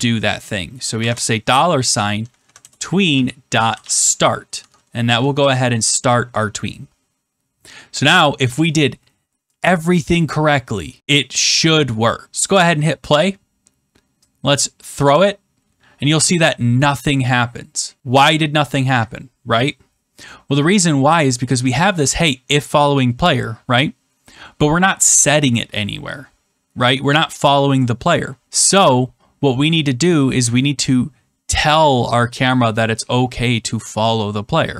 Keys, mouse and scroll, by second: 0.9 shift+4, 2.2 Down, 2.4 Down, 2.5 Return, 2.8-4.3 typing, 4.5 Tab, 5.3 ctrl+s, 10.4 click, 12.2 click, 14.5 click, 20.2 click, 21.5 click, 21.6 click.